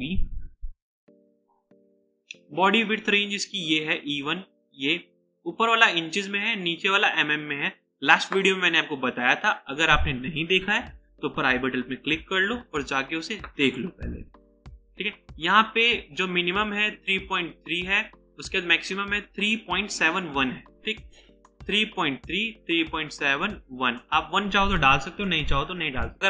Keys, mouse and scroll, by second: 9.1 click, 25.1 typing.